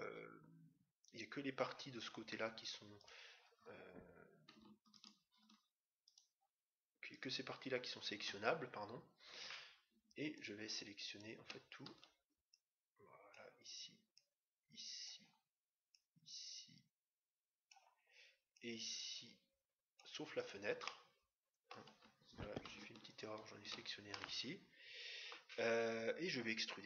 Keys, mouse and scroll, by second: 3.0-4.8 right drag, 5.0-8.8 right drag, 10.2-12.7 right drag, 11.8 c, 20.9-22.4 middle drag, 23.1-24.7 right drag, 24.1-25.8 middle drag.